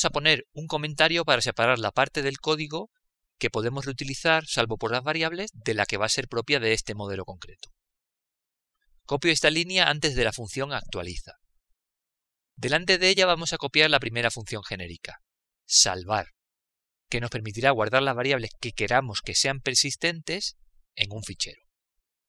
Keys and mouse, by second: 4.5 click, 10.8 click, 11.9 ctrl+v, 14.6 click, 15.5 Return, 15.7 Return.